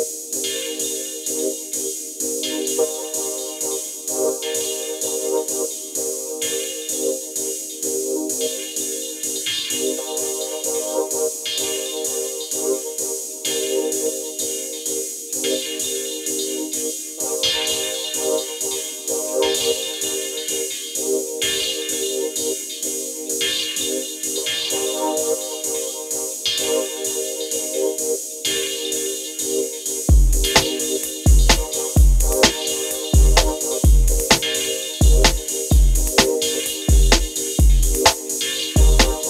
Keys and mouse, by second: 0.9-2.5 drag, 4.2 middle click, 4.6 middle click, 6.8-9.8 drag, 11.7 click, 22.7-26.4 drag, 26.4-28.1 drag, 34.3-35.3 drag, 34.3 middle click, 35.3-36.5 middle drag, 36.6 middle click, 37.2 middle click, 38.8-39.2 drag.